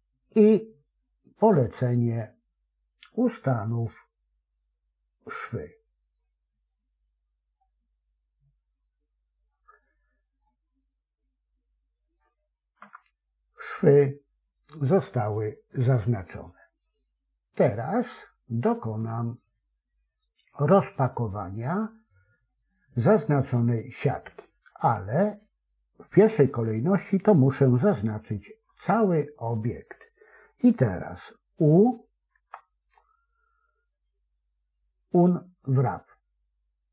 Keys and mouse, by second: 10.4-12.1 middle drag, 12.7 KP_7, 28.5 a, 32.2 u.